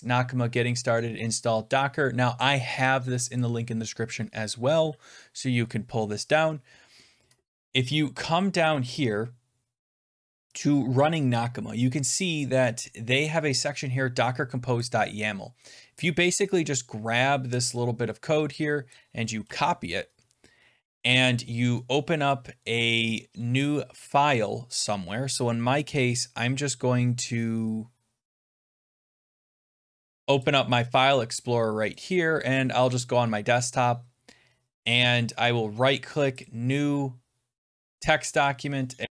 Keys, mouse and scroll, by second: 1.5 click, 2.4 click, 3.3-8.4 click, 7.8-8.4 scroll down 7, 9.9 click, 9.9 scroll, 13.5 scroll down 8, 14.7 click, 16.5-17.7 scroll down 12, 18.8 click, 19.3 ctrl+c, 19.6 scroll, 28.6 middle click, 29.2 click, 30.3 click, 31.8 click, 32.9 click, 35.3 right click, 36.3 click, 37.8 click, 39.0 ctrl+a, 39.0 Delete.